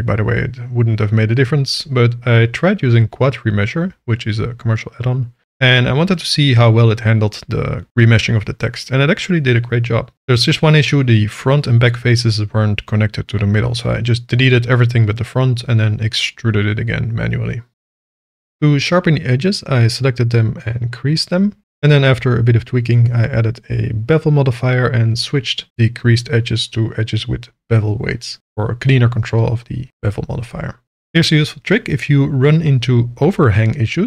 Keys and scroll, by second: 1.8 n, 9.1 Tab, 10.2 1, 14.0 ctrl+l, 14.5 ctrl+i, 15.3 a, 15.4 ctrl+z, 15.8 e, 17.1 shift+r, 18.7 shift+e, 19.1 Return, 20.0 Tab, 20.7 ctrl+2, 21.5 Tab, 22.2 alt+a, 22.5 shift+g, 24.0 1, 24.3 Return, 25.4 0, 25.6 Return, 26.6 Tab, 27.3 e.